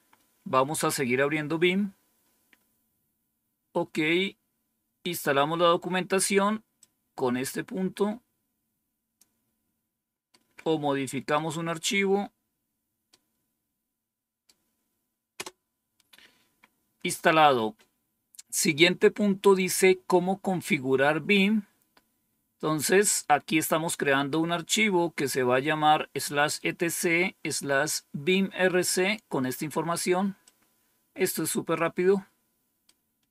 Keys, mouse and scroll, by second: 4.5-5.2 scroll down 1, 6.7-9.9 drag, 10.2-11.3 right drag, 13.0-14.4 right drag, 15.3 Return, 17.9-18.8 scroll down 1, 21.5-22.2 scroll down 1, 22.2-23.0 scroll down 1, 28.5-29.3 scroll down 1, 30.3-31.7 drag, 32.7-33.3 right drag.